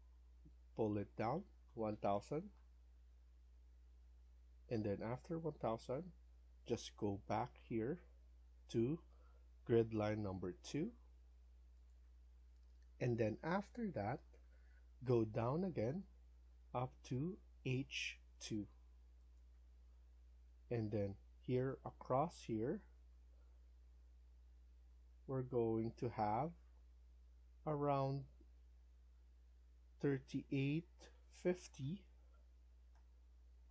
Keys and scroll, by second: 1.4-2.3 typing, 3.0 Return, 26.6 F1, 30.0-32.1 typing, 32.8 Return.